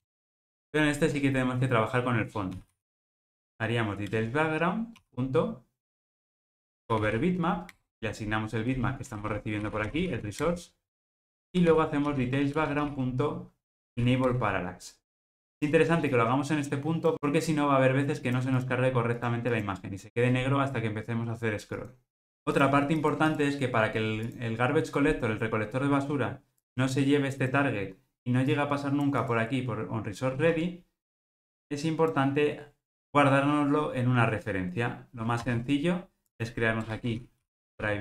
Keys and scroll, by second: 4.1 Return, 7.8 Return, 22.4 ctrl+alt+o, 35.5 super+x.